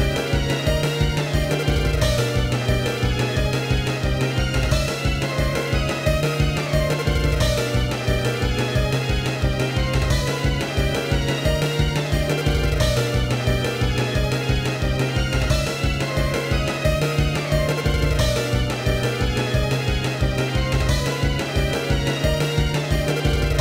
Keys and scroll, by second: 0.0 i, 1.5 i, 2.5 i, 4.4 ctrl+-, 4.5 ctrl+=, 4.8 ctrl+=, 4.9 i, 5.0 ctrl+=, 5.8 i, 6.4 i, 6.6 ctrl+-, 6.9 ctrl+=, 7.1 i, 8.3 i, 8.6 ctrl+-, 9.0 ctrl+=, 9.1 i, 9.8 i, 11.8 i, 13.1 ctrl+-, 13.4 ctrl+=, 13.6 i, 18.3 ctrl+-, 18.5 ctrl+=, 18.9 ctrl+=, 19.0 i, 21.6 i, 21.9 ctrl+-, 22.0 ctrl+=, 22.5 i, 22.8 ctrl+=.